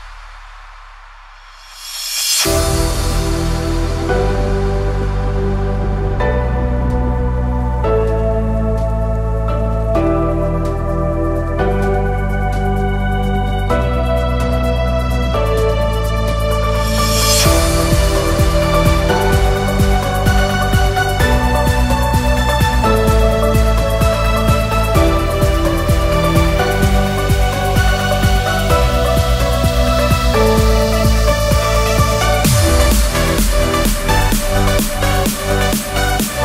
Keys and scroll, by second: 35.5 alt+Right.